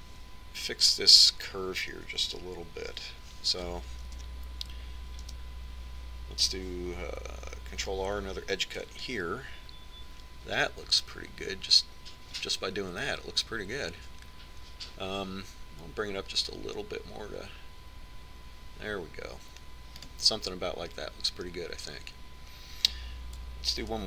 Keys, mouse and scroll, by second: 6.2 KP_1, 8.7 ctrl+r.